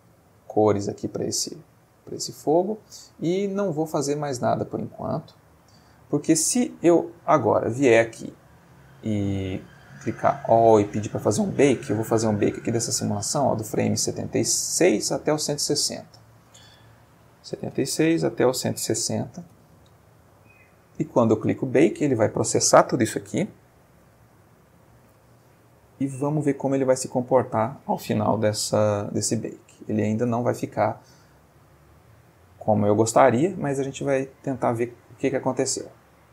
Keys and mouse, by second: 2.3 middle click, 3.6 middle click, 5.6 middle click, 7.2 middle click, 7.9 click, 9.5 click, 12.3-13.5 drag, 13.8 click, 16.2 click, 17.6-19.0 typing, 17.9 Tab, 19.4 Return, 20.7 click.